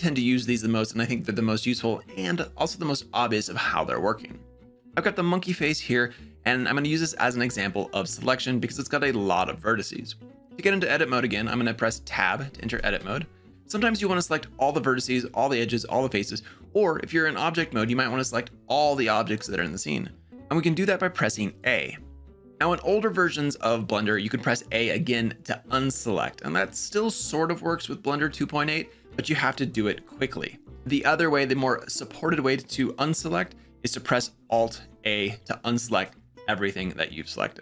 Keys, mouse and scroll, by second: 11.9 Tab, 21.4 a, 29.5 a, 30.5 a, 34.3 alt+a.